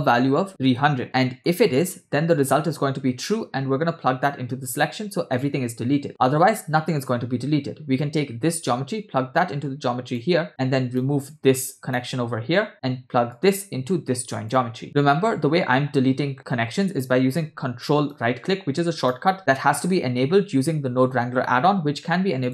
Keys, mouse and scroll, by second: 0.5 0, 1.0 middle click, 2.3-4.3 drag, 6.1-10.2 drag, 11.0-12.3 ctrl+right drag, 13.5-14.7 drag, 18.2 ctrl+right click, 18.4 ctrl+right click.